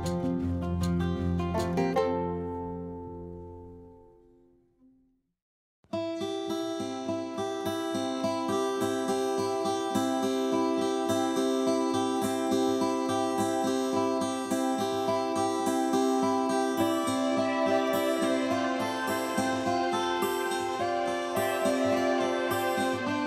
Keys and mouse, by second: 1.4 click, 2.1 click, 2.5 click, 3.0 click.